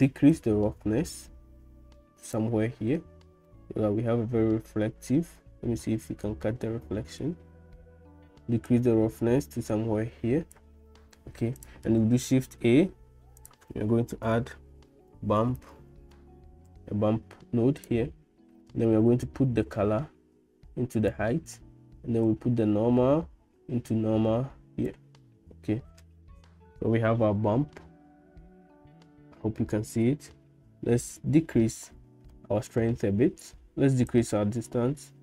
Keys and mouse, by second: 0.5-2.4 drag, 3.7-6.5 middle drag, 8.7-10.7 drag, 12.1 shift+a, 19.3-21.2 drag, 22.3-24.9 drag, 32.4 middle click, 34.2-35.2 shift+drag.